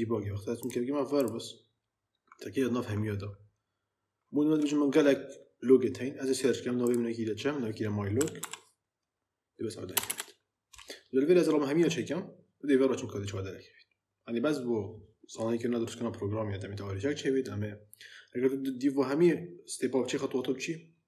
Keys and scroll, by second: 7.8-8.8 typing, 9.8 BackSpace.